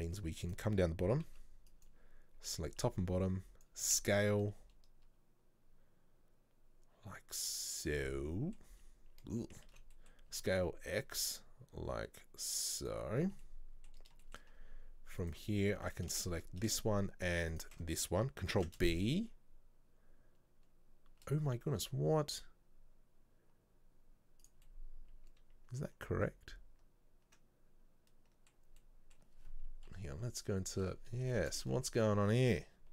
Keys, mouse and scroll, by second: 0.5 right click, 1.9 b, 3.7 b, 3.9 s, 8.1 middle click, 8.7-9.3 scroll down 1, 9.8 ctrl+z, 10.0 middle click, 10.4 s, 13.5-14.6 middle drag, 14.6-15.3 scroll up 1, 15.3 alt+right click, 16.3-17.6 shift+middle drag, 17.6 alt+shift+right click, 18.6 ctrl+b, 24.7-27.7 middle drag, 28.9-30.0 middle drag, 30.0 KP_3, 31.0-31.4 scroll up 1, 31.4 shift+middle click, 31.8 ctrl+z.